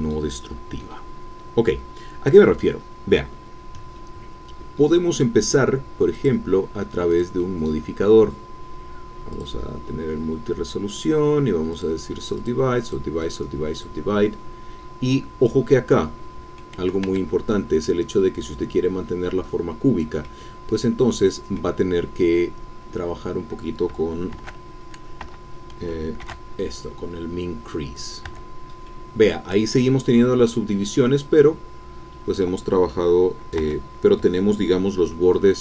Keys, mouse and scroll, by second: 6.1 click, 7.1 click, 9.3 click, 11.7 click, 12.4 click, 13.2 click, 13.7 click, 16.5 middle click, 17.0 Tab, 17.4-17.8 scroll up 1, 17.8-20.0 middle drag, 20.0 click, 20.9 scroll down 2, 21.2-25.1 middle drag, 24.3 shift+s, 25.2 Escape, 26.2 shift+e, 27.9 click, 28.2 Tab, 28.9-33.6 middle drag, 33.6 Tab, 34.2-35.2 shift+right drag.